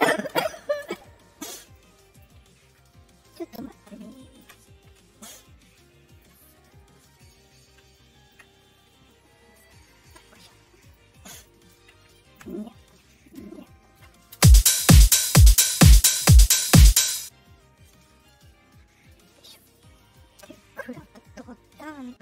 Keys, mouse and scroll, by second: 1.7 click, 3.2 click, 4.1 ctrl+click, 5.3 shift+click, 7.1 click, 7.8 ctrl+click, 9.0-10.0 shift+drag, 10.7 click, 11.4 ctrl+click, 12.1 ctrl+click, 13.0 shift+click, 14.3 space, 17.0 space, 18.1 right click, 18.9 right click, 20.0 click.